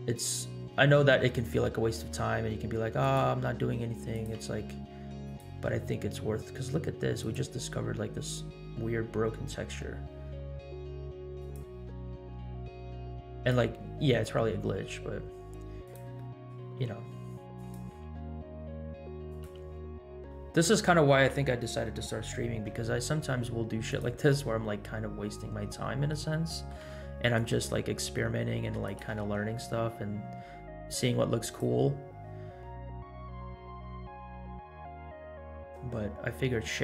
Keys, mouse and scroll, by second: 0.5 scroll down 1, 1.0-1.5 middle drag, 1.6 g, 3.8 g, 4.4 r, 5.7 g, 7.7 r, 12.1 r, 14.6 g, 16.3 middle click, 16.9 g, 18.1 r, 19.6 g, 21.8-22.2 scroll down 3, 22.8 g, 25.1 scroll up 1, 25.8 shift+middle drag, 26.4 middle click, 26.9 g, 27.6 r, 29.0 g, 32.4-33.9 scroll down 4, 34.3 scroll up 2, 34.9 scroll up 2.